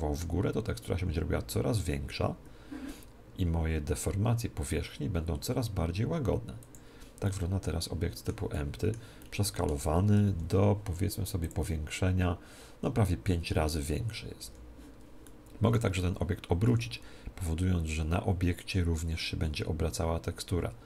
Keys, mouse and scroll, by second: 6.6-8.5 drag, 7.2-11.0 middle drag, 10.2 n, 11.4-13.2 drag, 14.4 n, 15.2-17.0 middle drag, 16.6 r.